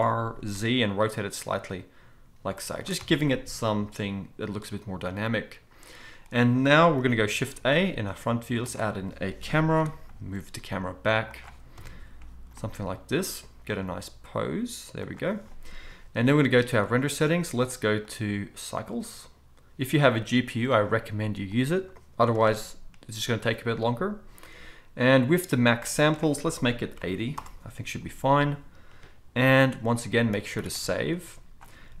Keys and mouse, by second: 3.1 alt+a, 7.0 KP_1, 7.3 shift+a, 9.5 KP_3, 10.3 g, 11.7-16.8 middle drag, 11.7 KP_0, 12.5 g, 13.8 g, 16.8 click, 17.0-18.0 middle drag, 18.0-32.0 drag, 30.4 ctrl+s, 30.6 ctrl+s, 30.7 ctrl+s.